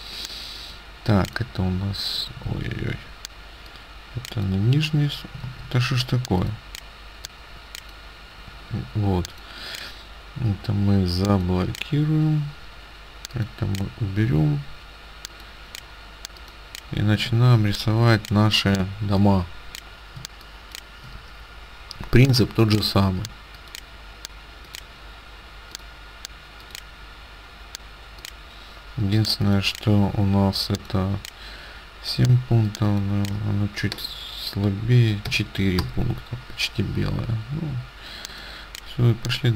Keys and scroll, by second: 2.6 ctrl+z, 5.5 ctrl+z, 17.4 ctrl+space, 35.3 KP_4, 35.8 Return.